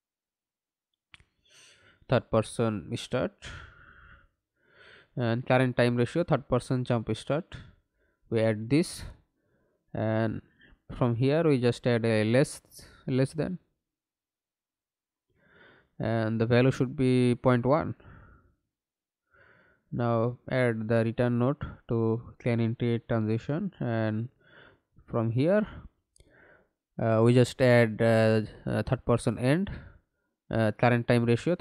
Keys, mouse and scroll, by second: 0.3-4.7 typing, 5.9-6.5 typing, 7.2 Up, 7.5 Up, 9.1 Return, 14.8 shift+,, 15.5 Return, 18.5 Right, 19.0 BackSpace, 19.9 1, 20.3 Return, 26.4 double click, 27.0 right click, 31.0 right click.